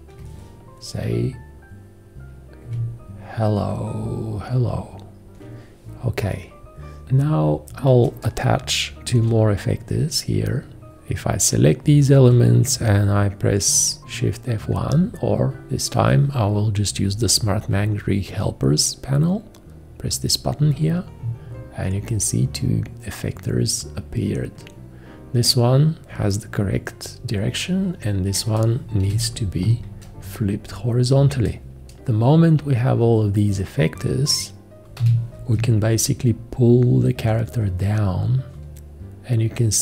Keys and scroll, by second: 9.1 v, 29.1 h, 35.0 g.